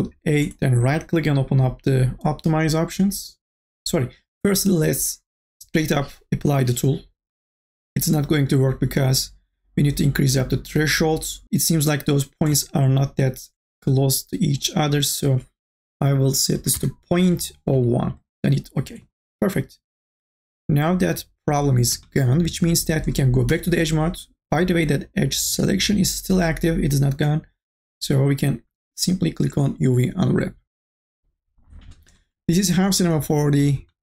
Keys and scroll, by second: 16.5 BackSpace, 17.7 KP_1, 23.5 2.